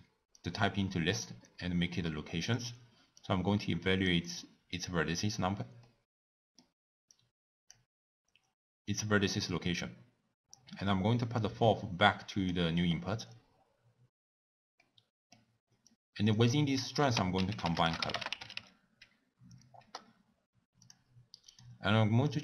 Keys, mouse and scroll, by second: 0.0 click, 1.4-4.3 drag, 13.9-20.0 drag, 21.7 click.